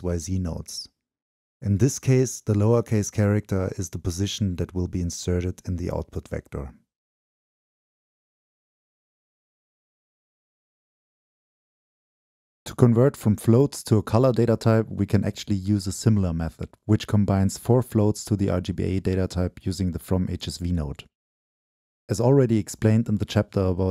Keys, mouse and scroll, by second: 7.0-9.1 middle drag, 12.0 middle click, 12.0-12.5 scroll up 2, 12.4-14.2 middle drag, 16.4-18.6 middle drag, 19.0 Return, 20.4 middle click, 20.4 scroll up 1, 23.0-23.5 drag.